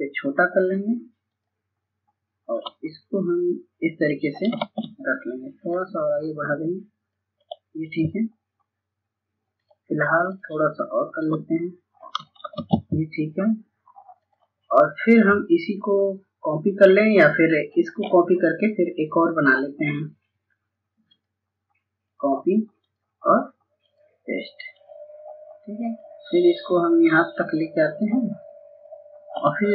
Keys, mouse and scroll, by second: 4.5 ctrl+space, 5.6-12.3 drag, 12.4 ctrl+space, 14.1-28.8 drag.